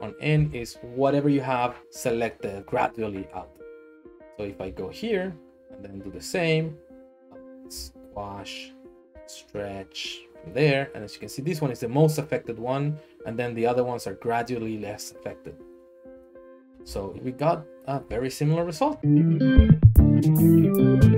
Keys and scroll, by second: 7.7 s, 9.1 s, 12.9 typing, 15.7 a, 16.6 a, 17.1 Tab.